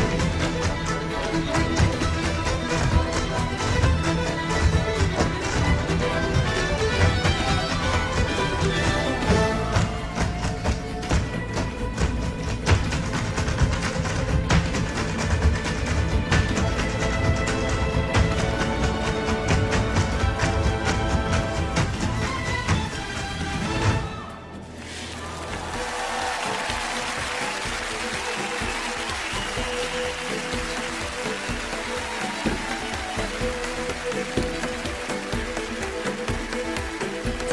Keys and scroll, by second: 9.3 super+j.